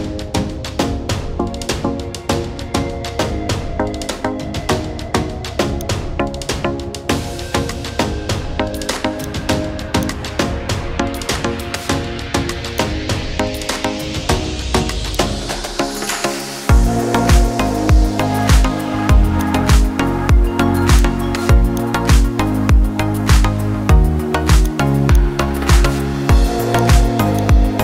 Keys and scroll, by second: 23.8 ctrl+z.